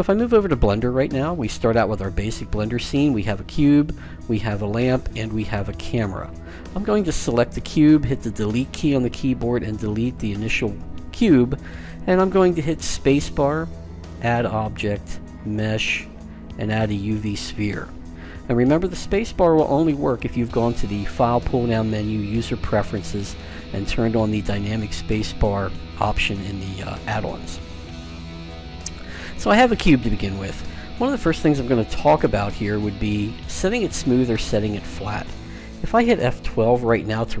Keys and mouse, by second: 0.6-3.8 middle drag, 3.8-8.7 right drag, 8.7 Delete, 13.0 space, 21.3-23.2 drag, 25.6-37.4 middle drag.